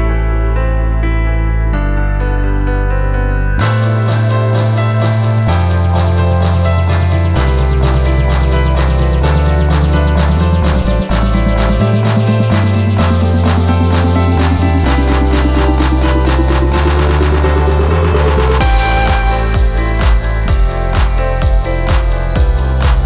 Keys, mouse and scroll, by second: 0.8-4.8 drag, 6.9 click, 10.1 click, 13.3-13.8 scroll down 3, 14.4 click, 16.7 click, 17.0-17.5 scroll up 2, 18.2-21.9 drag, 22.8 click.